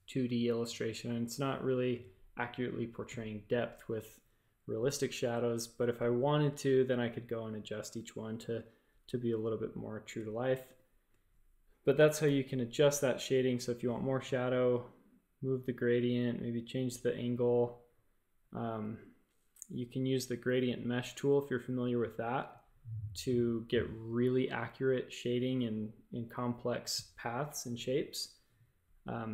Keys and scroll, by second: 5.9 space, 12.2 a, 12.8 g.